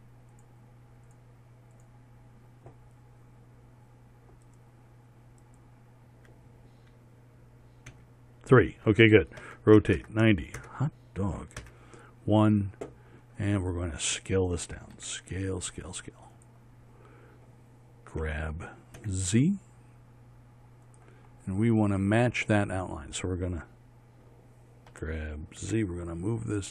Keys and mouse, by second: 8.5 KP_3, 10.0 r, 12.2 KP_1, 15.6 s, 18.7 g, 21.9 middle click, 22.3-25.5 drag, 25.5 g.